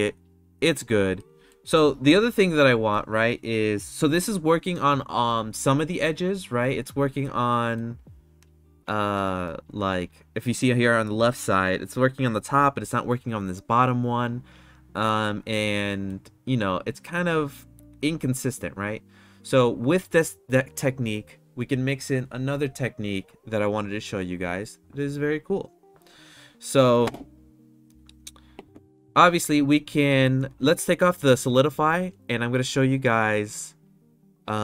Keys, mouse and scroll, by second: 1.2-1.6 middle drag, 2.6 middle click, 7.7-9.1 shift+middle drag, 15.5-16.0 middle drag, 18.0-18.5 middle drag, 32.0 click, 33.8 click.